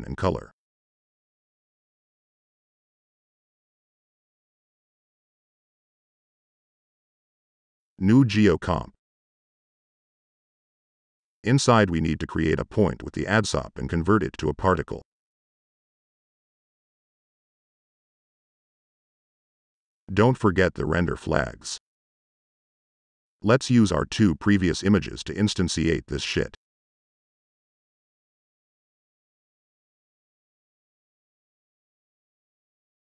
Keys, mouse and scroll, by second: 2.2-3.1 typing, 3.0 click, 3.6 click, 3.9 click, 7.3 click, 7.3 Tab, 7.6 g, 7.9 e, 8.2 click, 11.0 click, 11.2 Delete, 11.7 Tab, 12.0 a, 12.6 click, 13.2 click, 14.6 click, 15.6 right click, 15.6-17.1 typing, 18.7 click, 25.8-26.6 drag, 30.2-32.2 drag.